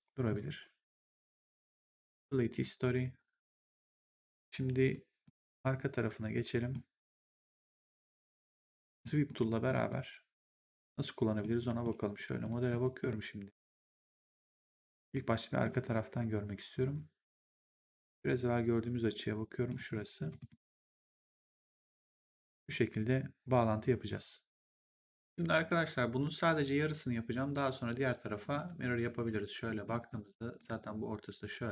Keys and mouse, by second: 1.9 click, 4.9 middle click, 6.3 middle click, 11.5 middle click, 17.3 middle click, 20.4 middle click, 25.1 click, 29.2 middle click, 30.3 middle click.